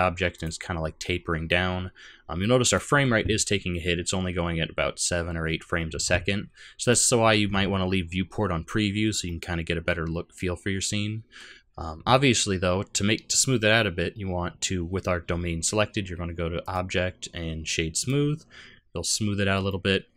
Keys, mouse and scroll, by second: 0.5 click, 2.7 click, 7.0 click, 9.2 middle click, 16.6 click, 19.1 scroll up 2, 19.7 middle click.